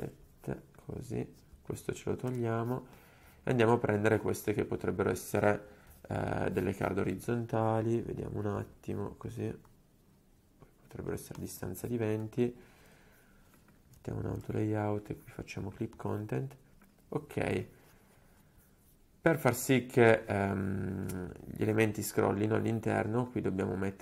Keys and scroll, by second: 0.0-0.5 typing, 2.3 BackSpace, 6.9 ctrl+g, 12.9 shift+a, 14.1 super+d.